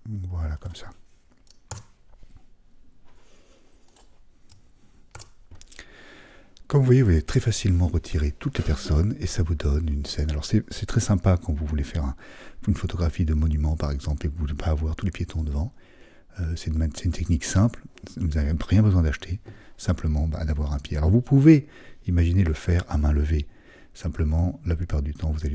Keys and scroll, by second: 1.7 super+s, 4.5 super+s, 5.1 super+d.